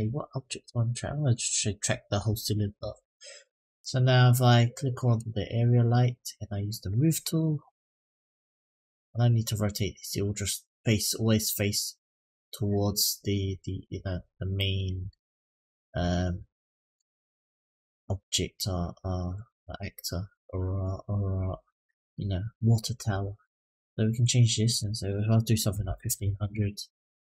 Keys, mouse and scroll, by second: 5.4 click, 7.0 click, 7.9-14.1 drag, 14.4 middle click, 15.1-15.7 scroll down 1, 15.7-16.2 scroll down 3, 16.2 middle click, 18.3-20.9 drag, 21.6-22.0 middle drag, 23.4 click, 24.5-26.3 drag, 26.0 KP_0.